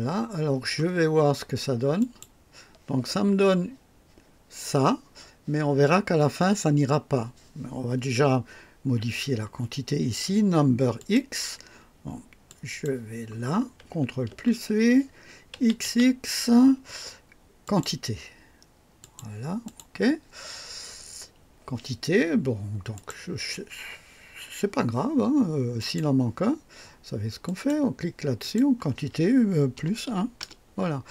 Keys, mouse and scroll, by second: 2.0 click, 10.9 click, 12.4 click, 14.3 v, 15.5 x, 15.8 x, 17.6 click, 19.0 click, 19.6 click, 22.9 click, 25.7 click, 27.4 click, 28.4 click, 29.7 KP_Add, 30.0 KP_1, 30.4 Return.